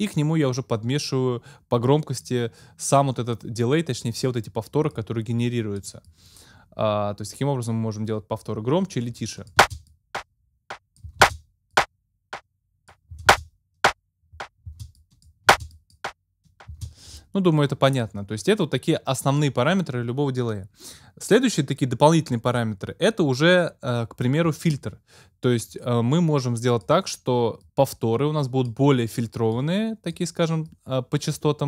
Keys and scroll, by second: 9.6 space, 11.1 space, 13.1 space, 14.7 space, 16.7 space.